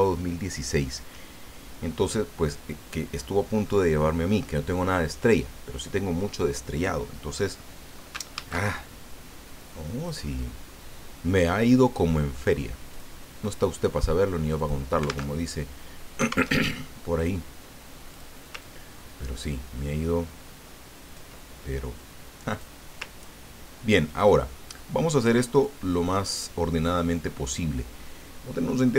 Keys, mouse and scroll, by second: 8.3 ctrl+shift+a, 9.9 click, 12.9 click, 14.5 click, 15.3 alt+Tab, 16.5 alt+Tab, 17.2 click, 18.1 click, 18.6-21.3 ctrl+drag, 22.5 click, 23.2-23.6 ctrl+scroll up 2, 24.4 click, 25.5 click, 26.0 click.